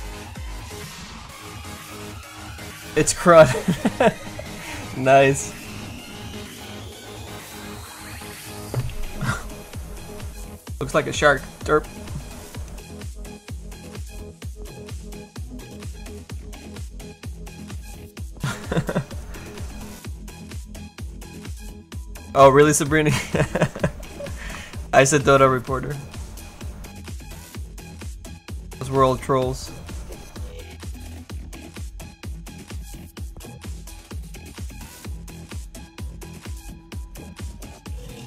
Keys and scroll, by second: 23.9 f.